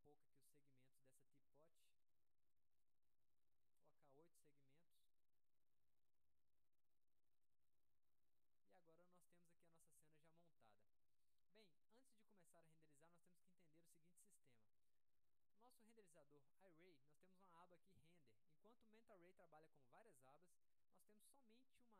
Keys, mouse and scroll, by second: 1.6 click, 2.6 click, 7.5 middle click, 10.5-11.3 drag, 12.0 click, 13.0 click, 14.0 click.